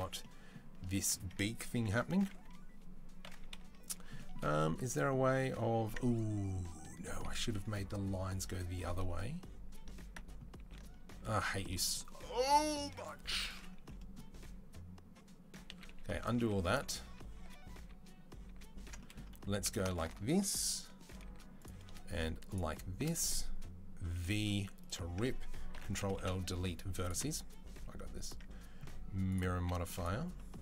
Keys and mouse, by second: 0.7 Tab, 2.1 KP_1, 3.4 KP_3, 10.5 ctrl+z, 11.4 ctrl+z, 13.4 ctrl+z, 15.5 ctrl+z, 15.7 ctrl+z, 16.2 ctrl+z, 16.5 ctrl+z, 16.8 ctrl+z, 17.2 ctrl+z, 17.6 ctrl+z, 18.3 ctrl+z, 18.8 middle click, 19.2 2, 19.6 alt+click, 20.1 alt+click, 20.1-21.7 middle drag, 21.1 z, 22.8-25.2 middle drag, 24.0 v, 25.6 ctrl+l, 26.0 Delete, 28.0-30.6 drag, 29.4 z.